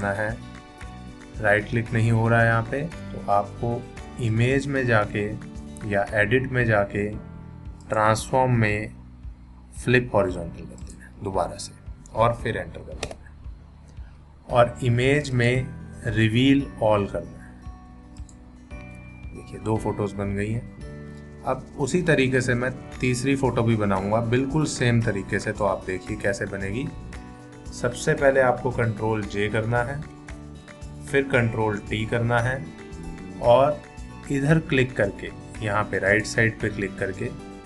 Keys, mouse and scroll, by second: 4.3 click, 7.8 click, 10.8 click, 13.0 Return, 15.3 click, 18.2 click, 24.8-25.8 drag, 29.5 ctrl+j, 31.8 ctrl+t, 36.1 click.